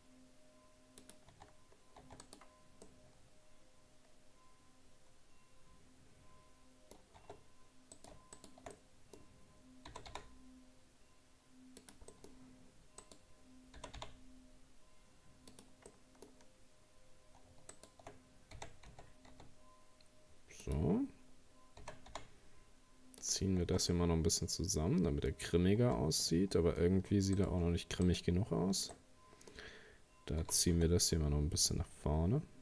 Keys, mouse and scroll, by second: 1.3 Tab, 1.6-2.0 scroll down 2, 2.0 Tab, 2.2 right click, 2.8-5.9 middle drag, 7.2 Tab, 8.0 right click, 8.4 shift+right click, 8.7-9.9 middle drag, 9.9 g, 12.1 middle click, 13.0 right click, 13.8 g, 15.9-17.7 middle drag, 17.7 shift+right click, 18.5 r, 21.8 s, 23.7 Tab, 23.9-25.5 middle drag, 25.5-25.8 scroll up 1, 25.8 Tab, 26.6 middle click, 26.8-27.4 scroll up 2, 27.4 right click, 28.1 shift+right click, 28.9-30.4 middle drag, 30.4 g.